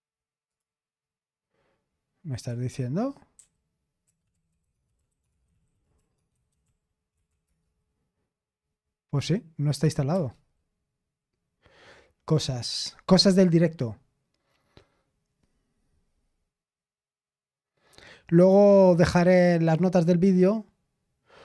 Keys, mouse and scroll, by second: 0.5 click, 2.4 click, 3.4-7.8 typing, 10.1 typing.